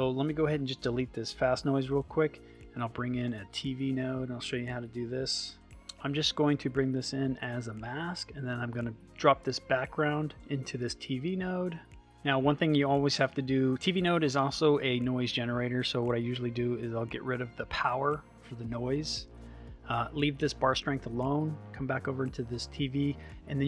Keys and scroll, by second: 0.7 BackSpace, 3.2-4.7 typing.